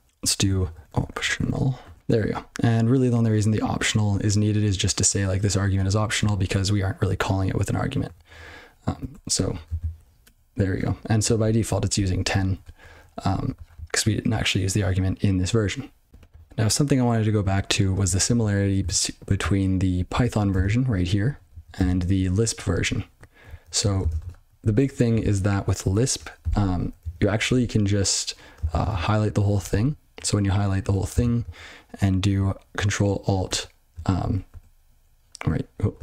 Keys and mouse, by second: 0.4 ctrl+/, 0.7-2.4 typing, 5.0 click, 5.7 click, 6.2 click, 8.1 ctrl+n, 8.2 ctrl+n, 9.0 ctrl+e, 11.3 ctrl+b, 11.5 ctrl+b, 11.9 ctrl+b, 12.3 ctrl+p, 12.6 ctrl+f, 12.8 ctrl+n, 13.2 ctrl+f, 13.5 ctrl+f, 18.0 ctrl+n, 18.2 ctrl+n, 18.5 ctrl+e, 18.9 Return, 19.6 ctrl+p, 19.7 ctrl+p, 19.8 ctrl+p, 20.0 ctrl+n, 20.3 ctrl+p, 20.5 ctrl+space, 20.5 ctrl+n, 20.7 ctrl+n, 21.2 ctrl+g, 21.4 ctrl+n, 21.7 ctrl+space, 21.8 ctrl+n, 22.3 ctrl+p, 22.6 ctrl+p, 22.8 ctrl+g, 23.1 ctrl+p, 23.3 ctrl+p, 23.4 ctrl+n, 23.7 ctrl+n, 23.9 ctrl+space, 24.0 ctrl+n, 24.1 ctrl+w, 24.2 ctrl+p, 24.6 ctrl+p, 24.8 ctrl+p, 26.7 ctrl+n, 26.9 ctrl+n, 27.3 ctrl+f, 27.5 ctrl+f, 28.6 ctrl+alt+space, 29.5 g, 29.7 g, 30.8 ctrl+/, 31.1 ctrl+space, 31.1 ctrl+n, 31.3 ctrl+n, 33.4 ctrl+alt+\, 34.1 ctrl+p, 34.4 ctrl+e.